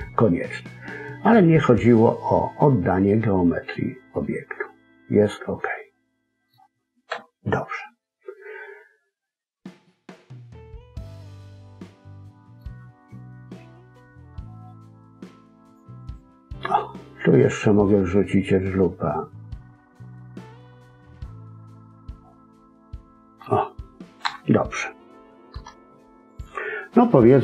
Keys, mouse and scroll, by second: 6.4-7.0 scroll up 1, 7.0 KP_1, 9.8 middle click, 13.6 ctrl+r, 16.5 middle click, 24.2 KP_1, 25.4 Tab.